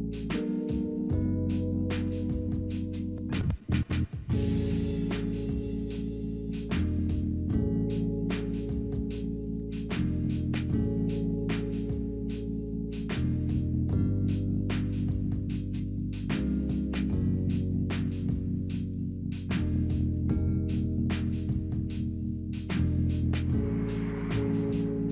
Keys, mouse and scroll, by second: 0.3 right click, 2.7 double click, 3.0-3.9 typing, 4.9 5, 5.0 Return, 9.4 double click, 9.6-10.6 typing, 23.7 double click, 23.8-24.8 typing.